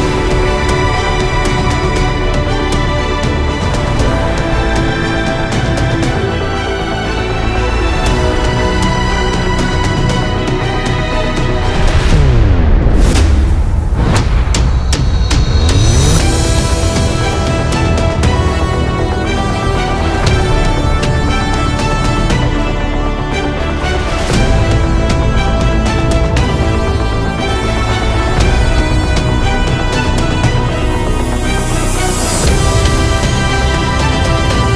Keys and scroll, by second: 25.7 typing, 27.6 typing.